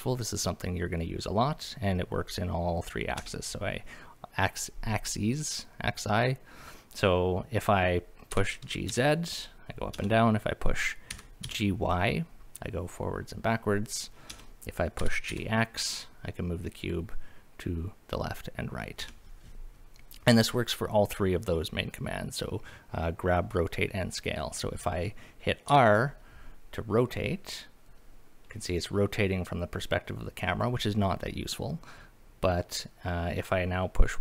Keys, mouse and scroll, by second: 3.2 Escape, 8.3 g, 8.9 z, 9.9 Escape, 11.1 g, 11.4 y, 14.3 Escape, 15.0 g, 15.3 x, 19.0 Escape, 25.7 r.